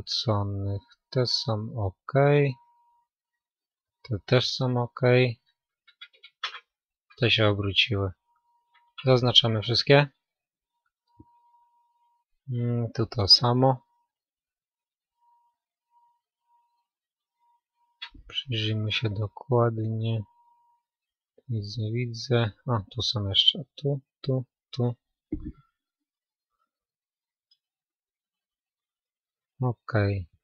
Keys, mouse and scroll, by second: 1.1-7.1 middle drag, 2.7 KP_3, 5.7 ctrl+KP_3, 7.1 a, 9.6 b, 16.0-24.1 middle drag, 23.1-30.4 right drag, 27.7-30.4 middle drag.